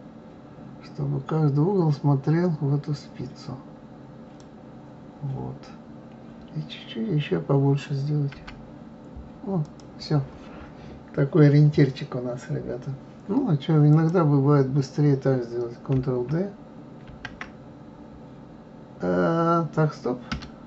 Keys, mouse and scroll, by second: 13.9 click, 17.1 shift+d.